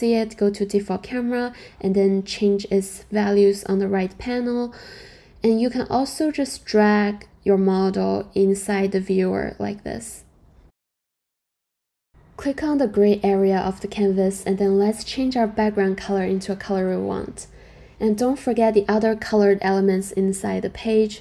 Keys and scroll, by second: 1.2-3.1 typing, 1.3 Return, 2.3 Return, 3.2 Return, 17.3 super+v, 17.3 Return, 18.8 Return.